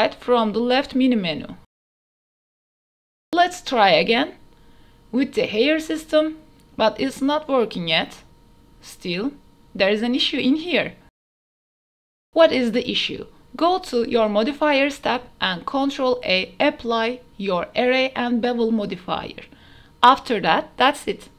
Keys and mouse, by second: 0.1 click, 2.2 click, 2.8-4.1 drag, 4.4 drag, 5.0 click, 5.3 shift+click, 5.5 ctrl+s, 7.5-8.1 drag, 9.1 click, 10.0 click, 10.5 KP_0, 11.8 click, 12.3 shift+click, 12.7 click, 17.1-17.7 drag, 19.1 click, 20.1-21.1 middle drag.